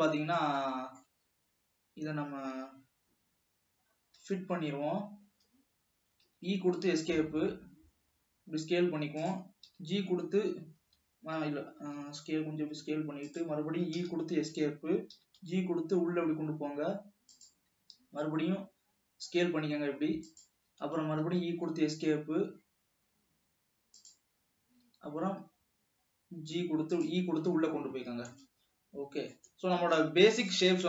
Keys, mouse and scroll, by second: 0.6-3.7 middle drag, 4.4 f, 6.6 e, 7.8 s, 10.0 g, 12.1 s, 14.2 e, 15.5 g, 18.1 s, 21.1 e, 21.9 s, 24.5-25.2 scroll up 2, 25.2 e, 28.2-28.8 scroll down 1, 28.8-30.2 middle drag, 30.2 ctrl+s.